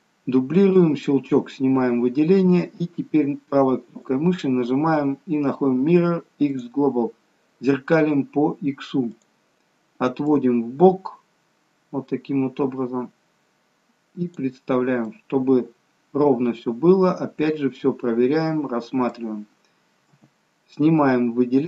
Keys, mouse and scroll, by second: 6.5 right click.